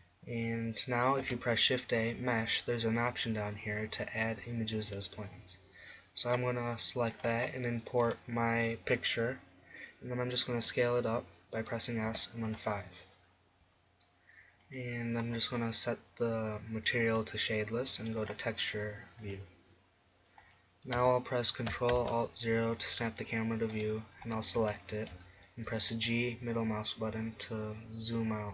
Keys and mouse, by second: 1.2 shift+a, 9.1-10.5 middle drag, 10.5 s, 12.6 click, 14.4 middle click, 16.3 middle click, 21.9 ctrl+alt+KP_0, 25.7 g.